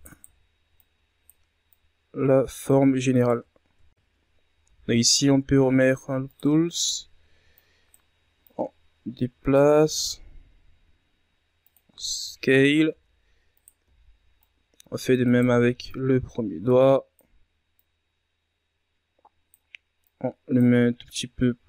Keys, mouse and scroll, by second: 0.3 c, 1.3 z, 1.9-4.2 drag, 4.2-8.2 alt+right drag, 8.2 w, 9.3-11.6 drag, 11.6 s, 13.8-14.7 shift+scroll down 4, 14.7 z, 15.4 right click, 16.2 c, 17.1 z, 17.7-21.6 drag.